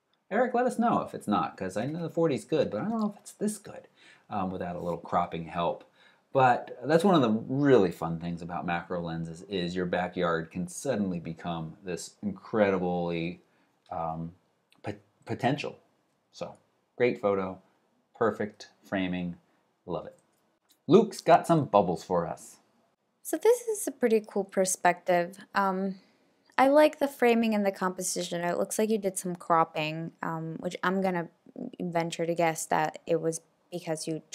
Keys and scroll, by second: 20.2 alt+super+Right.